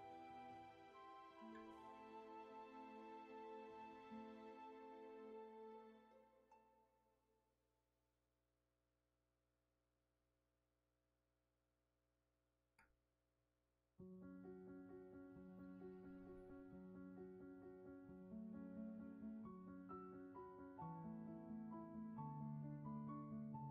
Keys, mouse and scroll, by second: 0.0 ctrl+z.